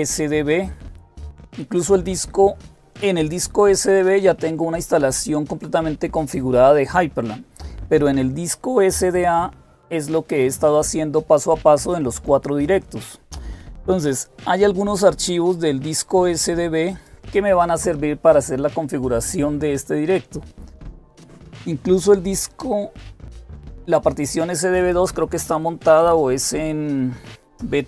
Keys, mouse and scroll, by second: 9.0-13.0 drag, 13.8-17.7 drag, 24.6-25.6 drag.